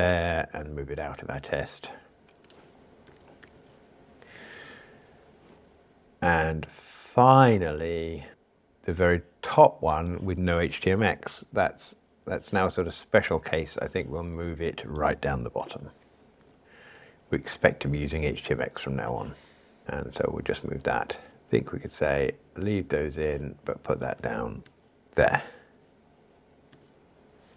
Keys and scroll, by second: 3.4 super+v, 15.6 super+x, 25.1 super+v.